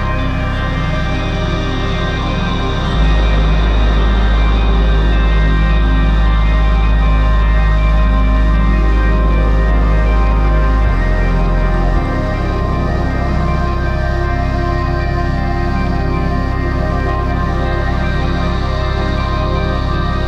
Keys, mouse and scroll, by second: 1.6 right click, 4.9 ctrl+z, 6.6 right click, 6.8 right click, 11.0 right click, 16.4 ctrl+z, 17.9 ctrl+z, 19.5 ctrl+z.